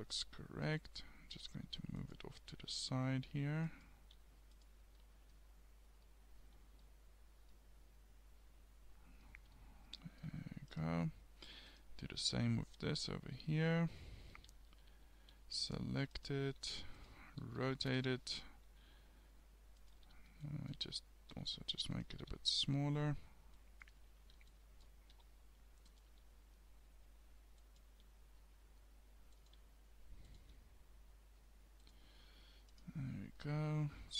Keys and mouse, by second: 1.7 s, 2.9 g, 4.1 s, 14.3 a, 14.5 a, 14.9 a, 15.3 g, 16.5 g, 17.5 r, 18.7 g, 20.1 a, 20.5-22.3 drag, 21.4 g, 22.3 g, 24.2 a, 25.2 g, 26.1 s, 28.0 g, 29.6 s, 30.5 g, 32.8 click.